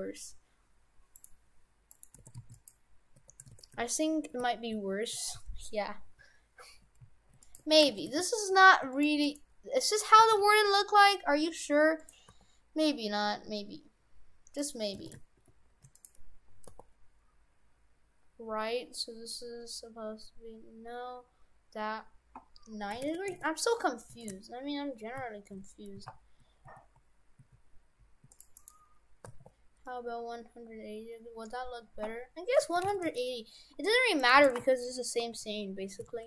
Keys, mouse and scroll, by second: 1.9 right click, 2.2 shift+f, 3.1 Tab, 3.5 shift+f, 7.6 Tab, 7.9 shift+f, 9.3 right click, 10.0 middle click, 10.2 a, 10.4 g, 12.3 r, 15.0 shift+f, 16.7 r, 24.2 shift+f, 28.6 right click, 29.3 r, 34.2 right click, 34.5 shift+f.